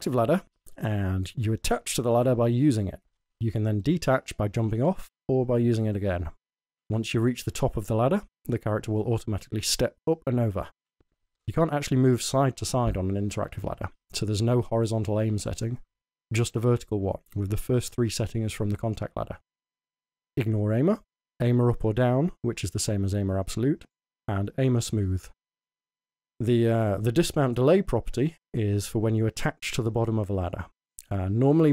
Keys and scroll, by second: 0.0-0.9 typing, 3.3 w, 4.8 a, 5.1 s, 6.0 w, 6.8 w, 10.8 s, 11.1 w, 11.9 s, 13.9 w, 14.5 w.